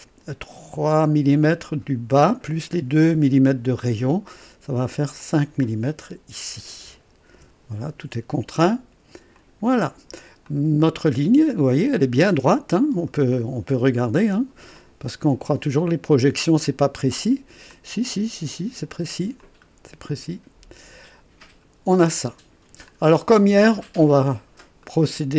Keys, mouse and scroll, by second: 1.5 click, 5.2 click, 6.7 KP_5, 7.3 KP_Enter, 9.3 click, 10.5-13.2 drag, 13.3-13.8 scroll up 1, 14.0 right click, 14.8 click, 16.6 click, 17.7-19.1 drag, 19.4-21.9 drag, 22.0 click, 22.9-23.2 scroll down 1, 23.4 right click, 24.0 click, 24.8 right click.